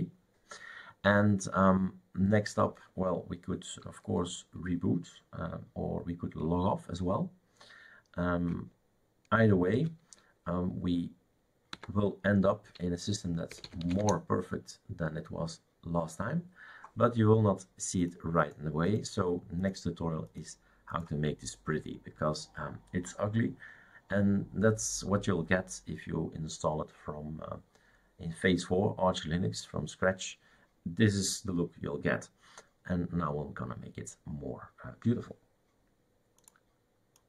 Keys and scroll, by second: 9.8 super+x.